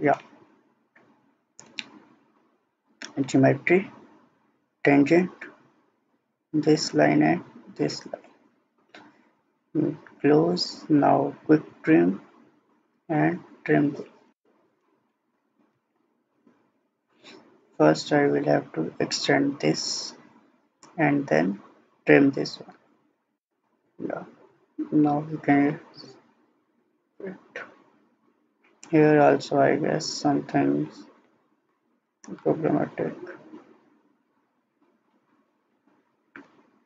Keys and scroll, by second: 0.8 Escape, 15.8 ctrl+z.